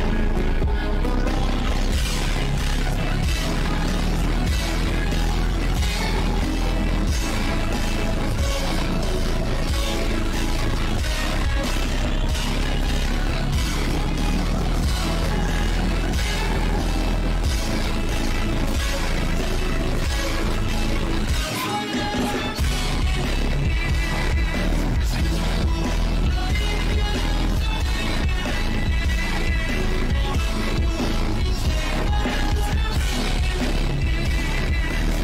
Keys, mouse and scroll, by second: 2.2 click, 3.0 shift+`, 3.6 click, 4.1 click, 4.5-5.8 drag, 5.8 shift+`, 6.7 click, 7.1 click, 7.8 click, 8.5 0, 8.9 shift+`, 9.5 click, 9.8 0, 10.2 shift+`, 11.3 click, 16.0 click, 16.4 click, 17.7 click, 18.0 click, 18.6 click, 20.3 click, 21.1 click, 22.0 click, 22.6 click, 25.2 click, 26.1 click, 27.0-27.4 drag, 28.3 click, 29.2-29.5 scroll up 2, 29.5-30.6 scroll down 1, 30.6 ctrl+z, 30.8 ctrl+z, 30.9 ctrl+z, 31.1 ctrl+z, 31.2 ctrl+z, 31.5 ctrl+z, 31.7 ctrl+z, 31.9 ctrl+z, 32.0 ctrl+z, 32.2 ctrl+z, 32.4 ctrl+z, 32.6 ctrl+z, 32.8 ctrl+z, 33.3 click, 33.9-34.4 scroll down 1, 34.4-34.8 scroll up 1, 34.8-35.2 drag.